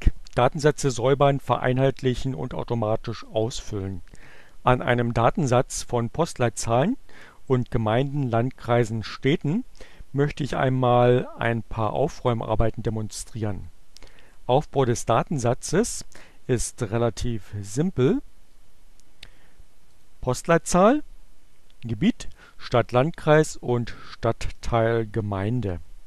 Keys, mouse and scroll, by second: 18.8-20.1 drag, 21.6 click, 22.9-24.0 drag.